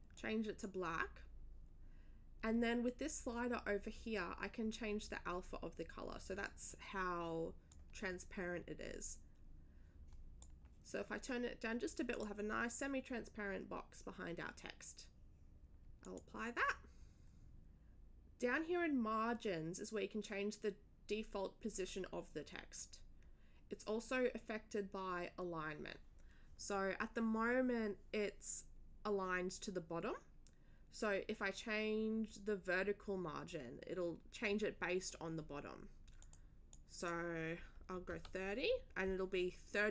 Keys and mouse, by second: 0.1 click, 0.8 click, 7.7-10.4 drag, 12.1 click, 16.0 click, 36.2 click, 36.7 click, 38.1 3.